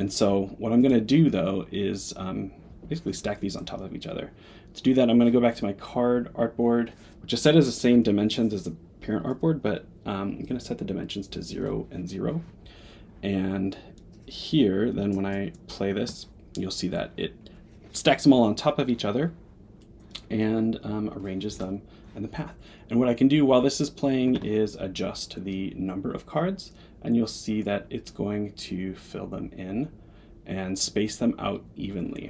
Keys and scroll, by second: 10.8 Tab.